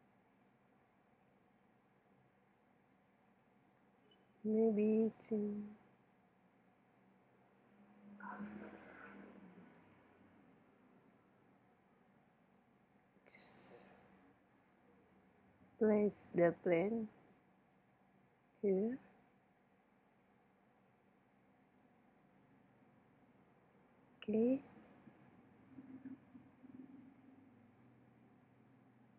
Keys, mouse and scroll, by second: 3.3-6.9 right drag, 6.9-9.5 middle drag, 7.8 KP_1, 9.8-11.5 right drag, 11.5 middle click, 12.1 middle click, 14.6 middle click, 16.6-18.4 drag, 20.7-24.2 drag, 24.2 middle click, 25.3 middle click, 26.1 click, 26.9 middle click, 27.0-29.1 middle drag.